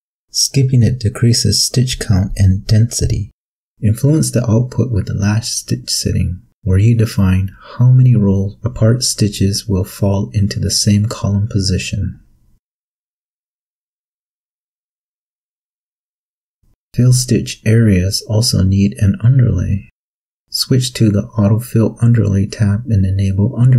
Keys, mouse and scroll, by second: 17.3 click, 19.4 click.